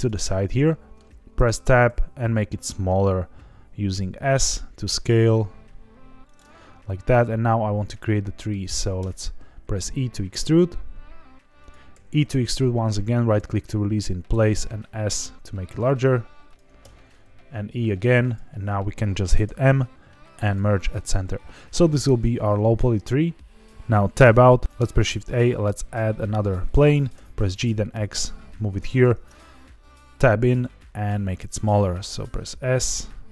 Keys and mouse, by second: 0.6 middle drag, 1.3 Tab, 1.8 s, 6.2 click, 6.5 shift+middle click, 8.0 shift+middle click, 8.9 e, 11.5 click, 11.9 e, 13.2 right click, 14.3 s, 16.4 click, 16.8 e, 18.2 click, 19.4 m, 24.2 Tab, 24.6 ctrl+z, 24.6 shift+a, 24.8 shift+a, 27.1 g, 27.3 x, 28.9 click, 29.1 Tab, 30.6 s.